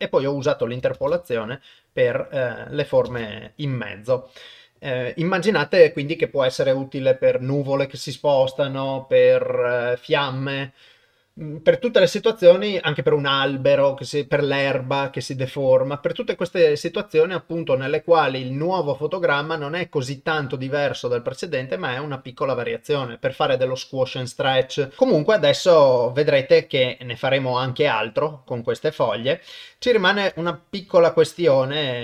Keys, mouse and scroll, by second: 1.0 shift+space, 3.1 shift+space, 25.0-27.6 drag, 29.2-29.7 drag, 30.3 shift+space.